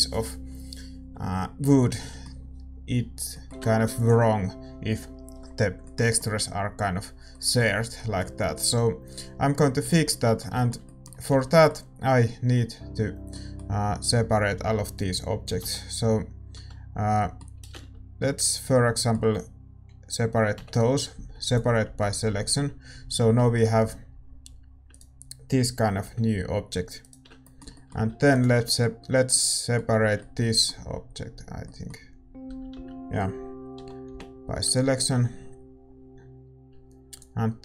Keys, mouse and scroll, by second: 4.0 ctrl+s, 9.9 shift+z, 12.6 Tab, 14.4 a, 14.5 a, 15.6 l, 18.7-22.7 middle drag, 18.7 l, 22.7 p, 24.4 Tab, 25.1-31.2 right drag, 26.0 g, 31.2 Tab, 31.2 a, 31.6-33.7 middle drag, 32.4 a, 32.7 a, 33.7 l, 35.9 p.